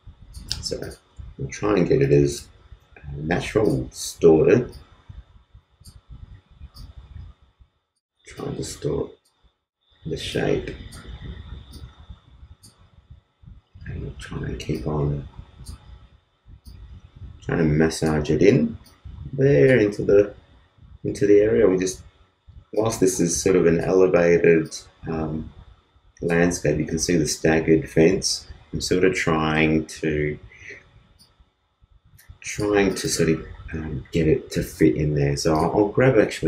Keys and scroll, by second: 1.5 super+space, 2.0 super+t.